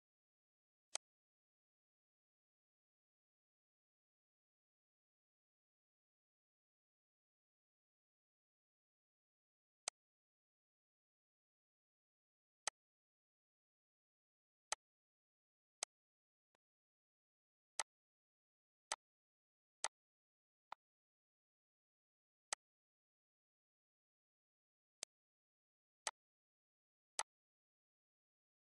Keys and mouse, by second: 0.3 click, 1.2 click, 2.2 click, 3.6 click, 4.8 click, 6.3 click, 9.0 click, 12.8 click, 13.5 click, 14.3 click, 15.3 click, 16.1 click, 17.0 click, 17.6 click, 19.7 click, 20.8 click, 21.7 click, 22.8 click, 24.3 click, 26.4 click, 27.2 click, 27.8 click.